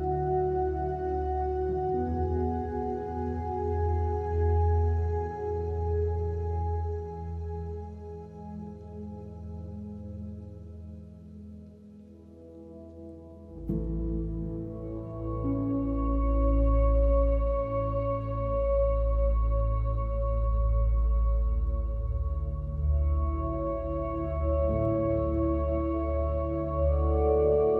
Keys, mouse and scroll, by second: 1.3 BackSpace, 1.3 BackSpace, 1.4 BackSpace, 1.9 BackSpace, 3.1-4.3 scroll up 1, 3.7 click, 4.3 click, 5.0 ctrl+s, 6.2 click, 6.6 click, 7.1 click, 8.6 shift+middle click, 13.4 shift+a, 14.6 click, 15.4 click, 16.3 click, 16.6 drag, 16.9 click, 17.6 click, 18.1 click, 18.6 click, 19.9 click, 20.1 click, 20.4-20.8 drag, 20.8 drag, 23.5 middle drag, 23.9 alt+shift+middle click, 24.1 alt+shift+middle click, 24.9 click, 25.1-26.4 middle drag, 26.9 middle click, 27.5 middle drag.